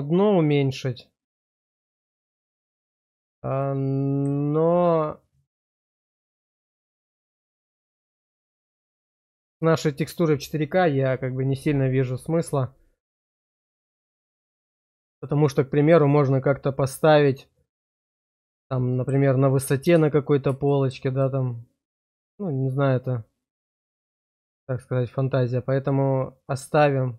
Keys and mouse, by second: 0.4-2.6 middle drag, 3.5 shift+middle click, 5.7-7.9 middle drag, 8.3 shift+middle click, 9.0 middle click, 13.0-14.1 middle drag, 15.1 shift+click, 15.5-19.1 drag, 20.7 shift+click, 21.2-25.1 drag, 25.1-27.1 middle drag.